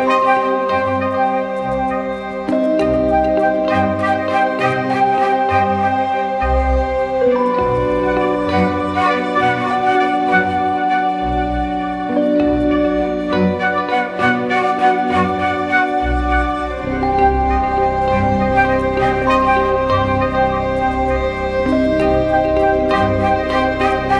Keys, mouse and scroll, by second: 17.6 double click.